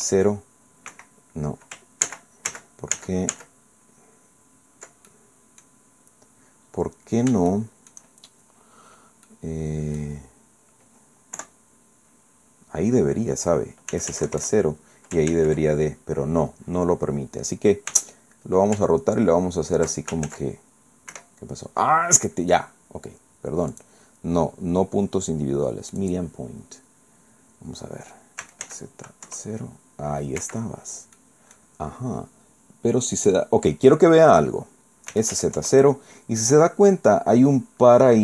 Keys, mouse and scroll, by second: 0.9 Escape, 2.1 ctrl+z, 5.1 ctrl+click, 5.8-6.1 scroll down 2, 6.1 middle click, 6.5-6.9 scroll down 2, 7.5 shift+scroll up 2, 7.5 shift+middle click, 8.3-8.7 shift+scroll up 3, 8.9 scroll down 2, 9.3 middle click, 11.4 KP_1, 13.9 s, 14.1 z, 14.3 KP_0, 14.4 KP_Enter, 15.3 ctrl+z, 17.9 r, 20.3 ctrl+z, 21.1 Escape, 23.7 click, 26.0 click, 28.4 s, 28.7 z, 30.4 Escape, 31.2 click, 31.9 middle click, 35.1 s, 35.3 z, 35.6 KP_0.